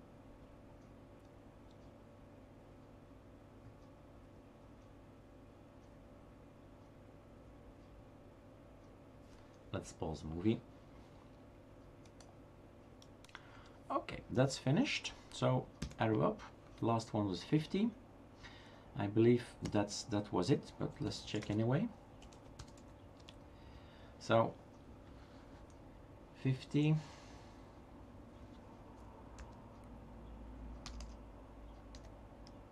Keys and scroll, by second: 15.8 Up, 19.7 Down, 20.8-21.7 typing, 24.2 typing, 29.4 Up, 30.9-32.7 typing.